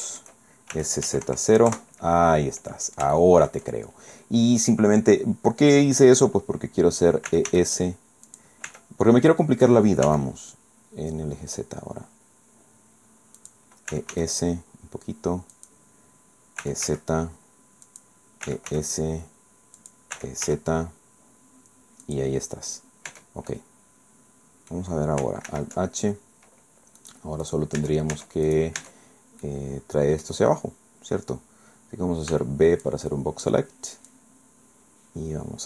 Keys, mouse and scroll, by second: 0.7 shift+s, 1.0 z, 1.2 KP_0, 1.7 KP_Enter, 2.4 middle click, 3.2 shift+middle click, 3.8 shift+scroll up 1, 7.3 e, 7.5 s, 8.3 click, 8.7 e, 10.0 z, 13.4 click, 13.9 e, 14.1 s, 15.6 click, 16.6 e, 16.8 z, 17.8 click, 18.4 e, 18.7 s, 19.8 click, 20.2 e, 20.4 z, 22.0 click, 22.7 scroll down 2, 23.1 Tab, 23.5-24.9 drag, 25.5 alt+h, 27.0 click, 27.4 click, 27.8 Tab, 28.5 right click, 29.1 Tab, 29.4-30.4 drag, 32.3 b, 32.8 click, 34.1-35.6 drag.